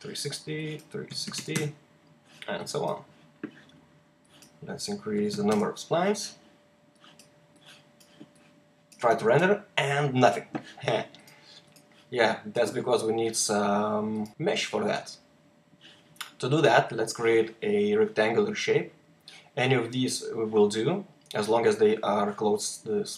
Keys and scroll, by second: 1.0 Tab, 1.1-4.0 typing, 5.2 typing, 5.4 Return, 9.1 r, 11.4-11.9 typing.